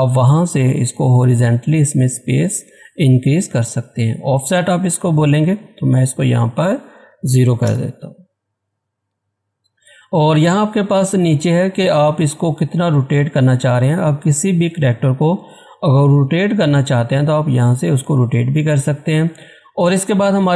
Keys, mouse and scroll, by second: 5.3-7.0 drag, 7.0 0, 7.6 Return.